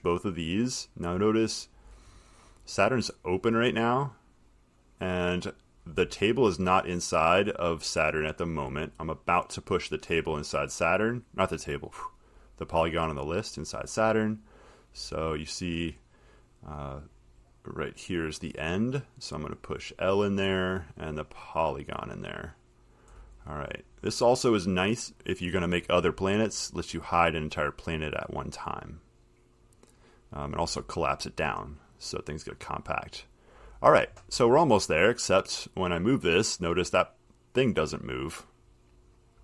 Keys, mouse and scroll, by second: 2.1 middle click, 2.1 middle click, 2.1 middle click, 2.6 middle click, 3.7 click, 8.7 click, 9.4 middle click, 9.5 middle click, 11.2 click, 11.9 click, 12.9 click, 14.0 click, 14.6 middle click, 17.3 click, 20.5 click, 22.1 click, 23.7-26.3 scroll, 26.7 click, 27.3 click, 29.0 click, 29.9 click, 33.3 click, 38.4 click, 39.3 click.